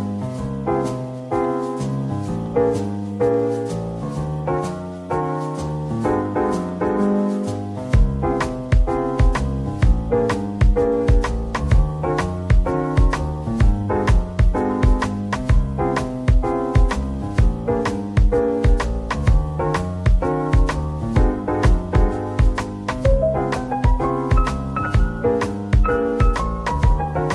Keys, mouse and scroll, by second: 1.5 double click, 3.5 shift+click, 4.0 middle click, 4.7 scroll up 1, 6.2 shift+click, 6.8 shift+click, 7.5 shift+click, 12.0 Tab, 12.6 Tab, 13.2 middle click, 16.0 scroll up 1, 16.9 shift+click, 18.2 shift+click, 19.3 shift+click, 22.0 ctrl+l, 24.0 shift+click, 26.6 ctrl+l.